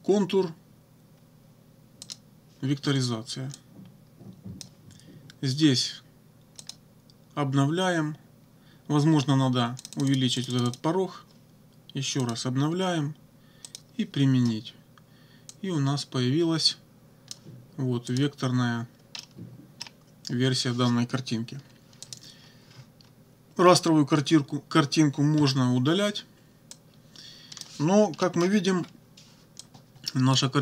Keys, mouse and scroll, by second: 2.0 click, 3.6-4.8 drag, 6.6 click, 9.8 click, 12.2 click, 13.7 click, 15.5-17.5 drag, 18.1 click, 19.2 click, 22.0 click, 25.4 Delete, 26.8-27.8 drag, 28.2 click, 28.7 -, 29.6 click.